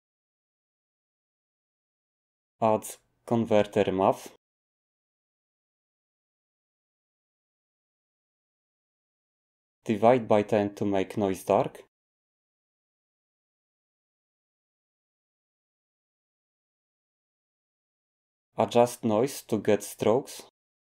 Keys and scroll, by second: 3.0 a, 15.9-16.6 typing, 19.2-20.9 typing.